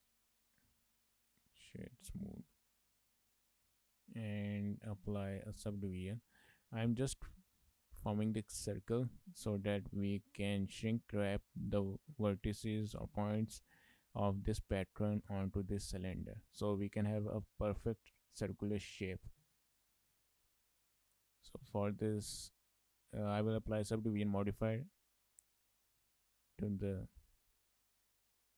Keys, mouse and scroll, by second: 0.3 right click, 2.3 shift+middle click, 2.5 middle click, 3.5 scroll down 3, 3.8 middle click, 5.6 click, 7.9 click, 9.4 middle click, 10.5 shift+middle click, 10.7 middle click, 11.6 shift+middle click, 12.6 middle click, 13.2-14.2 scroll up 2, 14.2 middle click, 16.9 middle click, 21.2 click, 23.1 click, 26.1 shift+middle click, 26.3 middle click, 28.2 click.